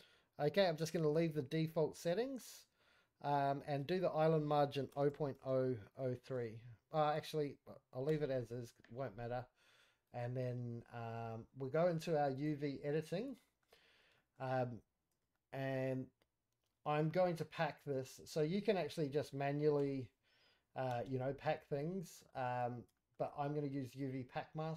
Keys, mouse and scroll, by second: 10.3 click, 11.1-12.3 scroll down 2, 12.4 click, 12.4-12.7 scroll down 2, 12.7-13.3 scroll up 4, 13.3 shift+middle click, 13.6-15.2 shift+scroll down 8, 14.1 shift+middle click, 15.3 shift+middle click, 15.7-16.1 scroll up 3, 16.1-17.1 scroll down 2, 17.1-17.5 scroll up 2, 17.5-18.1 scroll down 1, 18.1 scroll up 1, 18.3 shift+middle click, 18.7 click, 18.7 scroll down 1, 19.7 l, 20.9 g, 22.0 scroll down 2, 22.2 shift+middle click, 22.5 scroll up 2, 23.0 shift+middle click, 23.9 click, 24.6 scroll down 3.